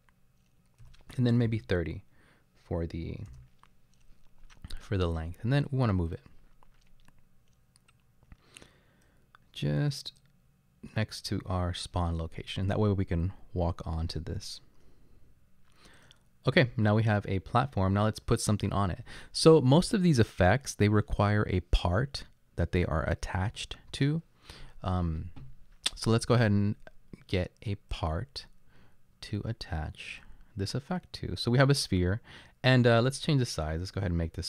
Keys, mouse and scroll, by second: 0.8-1.5 typing, 3.3 Return.